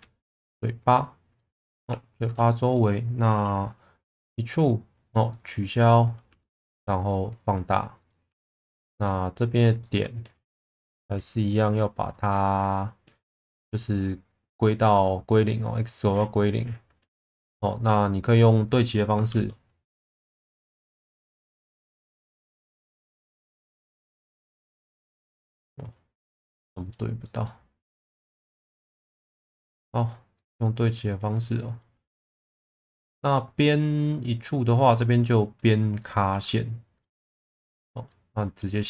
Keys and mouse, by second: 0.3 ctrl+click, 1.3 ctrl+click, 1.7 alt+middle click, 2.5 shift+middle click, 4.1 e, 5.3 right click, 6.3 s, 8.2 1, 8.8 click, 9.8 shift+middle click, 19.3 shift+Tab, 22.8 click, 25.5 middle click, 26.7 shift+middle click, 27.2 middle click, 28.5 click, 31.1 click, 32.1 middle click, 33.1 shift+middle click, 34.6 2, 34.9 click, 35.3 right click, 36.3 1, 38.1 click.